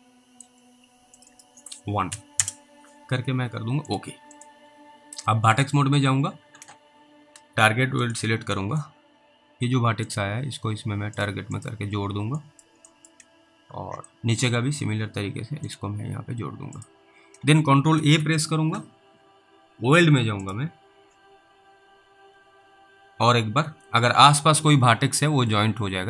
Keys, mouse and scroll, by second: 1.2 click, 1.4 double click, 2.1 1, 2.4 Return, 3.9 double click, 4.4 double click, 5.6 double click, 8.8 middle click, 9.0-9.5 scroll up 1, 10.1 click, 12.0-12.4 scroll down 2, 12.7 middle click, 13.0 middle click, 13.7 scroll up 1, 14.4 alt+middle click, 14.7-15.5 scroll up 1, 15.7 click, 18.0 ctrl+a, 20.5 click.